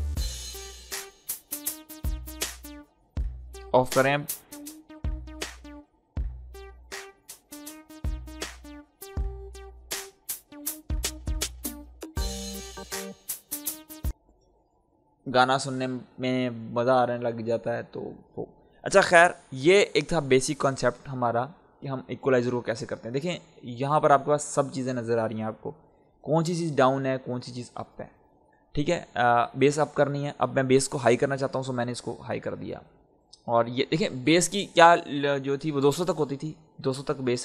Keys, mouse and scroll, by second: 3.2-3.5 scroll up 1, 4.0-8.5 drag, 14.0 space, 19.1-22.9 drag, 31.5 click, 31.6-37.4 drag.